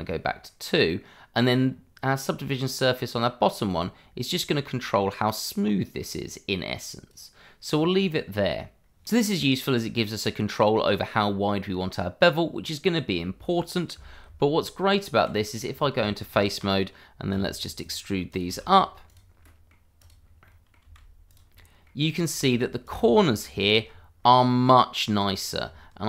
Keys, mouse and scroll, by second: 0.4 middle click, 1.6-2.9 scroll up 1, 2.9 click, 7.7-8.1 scroll down 1, 8.1 middle click, 10.0 click, 12.5 click, 13.2 middle click, 14.2 Tab, 15.5 click, 17.3 e, 17.8 click, 18.4 double click, 18.4 e, 19.0 click, 19.4 middle click, 19.9 click, 20.2 scroll down 1, 20.4 middle click, 20.8 e, 21.2 click, 21.5 middle click, 22.1 click, 22.3 e, 22.8 click, 23.2 middle click, 23.7 shift+middle click, 23.8-24.2 scroll up 1, 24.2 middle click, 25.0-25.3 scroll down 1, 25.6 Tab.